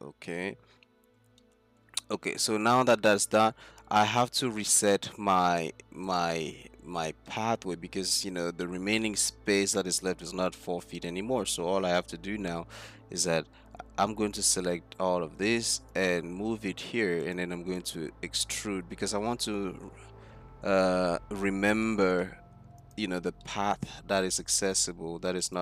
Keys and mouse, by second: 1.0-1.4 middle drag, 2.3-2.6 middle drag, 2.8 middle click, 3.0-3.5 middle drag, 4.0 z, 6.1 click, 7.2-7.7 drag, 8.3-8.9 drag, 12.0 Tab, 13.8 a, 14.2 a, 14.5 a, 16.0-17.3 drag, 19.3 e.